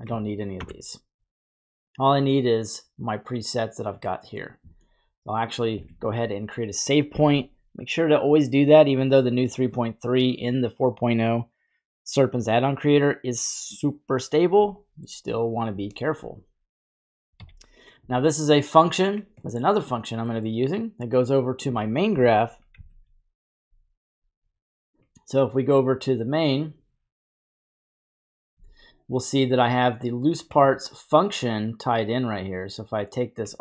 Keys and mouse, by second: 0.6 Delete, 2.0 click, 3.9 click, 7.4 ctrl+s, 14.8 middle click, 16.3-17.0 drag, 17.3-17.9 typing, 18.6 click, 19.2 typing, 19.5 middle click, 20.3 middle click, 22.7 n, 25.7 click, 28.1 click, 28.6 n, 29.8 click, 32.8 click.